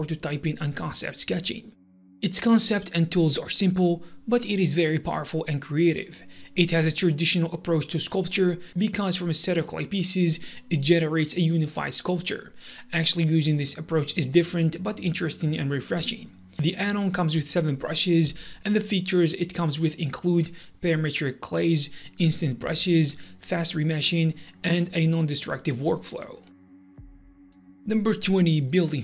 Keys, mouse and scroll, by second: 0.1 click, 0.2 Tab, 0.3 scroll down 1, 0.6 click, 0.7 middle click, 0.8 click, 1.0 Tab, 1.3 KP_3, 1.3 g, 1.5 Tab, 1.5 scroll up 1, 1.6 middle click, 1.6 click, 1.7 scroll down 1, 1.9 click, 2.0 KP_1, 2.2 KP_7, 2.3 Tab, 2.5 click, 2.8 scroll up 1, 3.1 click, 3.2 Tab, 3.3 click, 3.7 click, 3.9 click, 4.0 Tab, 4.1 g, 4.5 click, 4.8 click, 5.0 right click, 5.0 click, 5.2 click, 5.3 KP_3, 5.6 click, 5.7 scroll down 1, 6.0 click, 6.1 Tab, 6.6 scroll down 1, 6.7-9.5 typing, 7.1 click, 7.3 Tab, 7.3 click, 7.9 Tab, 8.1 F9, 8.1 click, 8.2 Tab, 8.2 right click, 8.6 F1, 9.7 click, 9.9 Tab, 10.3 click, 10.4 Tab, 10.5 Tab, 10.8 click, 11.5 click, 11.7 F10, 11.9 KP_3, 12.1 middle click, 12.1 scroll up 1, 12.2 F1, 12.3 click, 12.5 click, 12.7 shift+w, 13.1 KP_3, 13.5 click, 13.6 right click, 13.7 click, 13.8 middle click, 13.9 click, 14.1 middle click, 14.1 click, 14.6 g, 15.2 Tab, 15.3 click, 15.5 click, 15.6 g, 15.7 shift+w, 16.1 Tab, 16.6 click, 16.8 Tab, 17.2 click, 17.3 shift+middle click, 18.2 click, 18.3 click, 18.4 Tab, 18.5 click, 18.9 Tab, 19.0 KP_3, 19.1 Tab, 19.4 Tab, 19.4 shift+w, 19.9 click, 20.1 Tab, 20.5 click, 20.6 Tab, 20.7 click, 20.8 Tab, 20.9 click, 21.3 KP_6, 21.5 g, 21.7 shift+Tab, 22.0 click, 22.3 scroll down 1, 22.5 shift+right click, 22.5 click, 22.7 click, 22.9 Tab, 23.0 click, 23.2 Tab, 23.3 click, 23.4 Tab, 23.5 click, 23.5 Tab, 23.5 right click, 23.6 click, 23.8 click, 23.9-25.7 typing, 24.1 click, 24.6 Tab, 24.6 right click, 24.9 Tab, 25.0 click, 25.1 Tab, 25.2 click, 25.4 click, 25.6 Tab, 25.6 scroll down 1, 25.9 click, 26.2 Tab, 26.4 click, 26.6 click, 27.0 KP_6, 27.2 Tab, 27.2 click, 27.4 click.